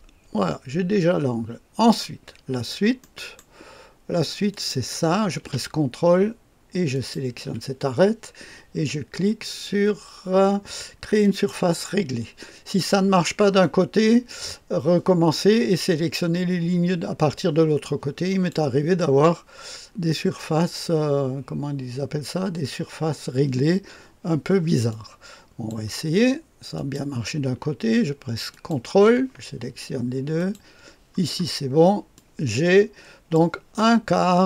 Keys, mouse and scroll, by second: 2.4-2.9 scroll up 2, 2.9 right click, 4.4 click, 6.9 ctrl+click, 11.2 click, 13.5 click, 17.8 click, 24.8 click, 26.7 click, 28.5 ctrl+click, 30.3 click, 30.7 click, 31.3-32.1 scroll down 1, 32.1-34.4 drag.